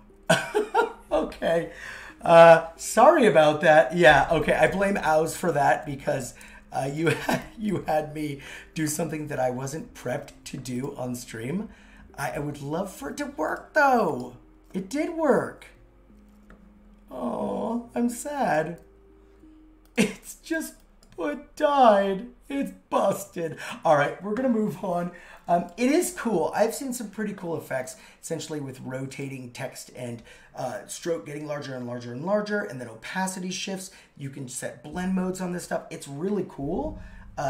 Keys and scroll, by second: 5.7 super+x, 6.6 super+z, 28.6 shift+Caps_Lock, 30.0 super+z.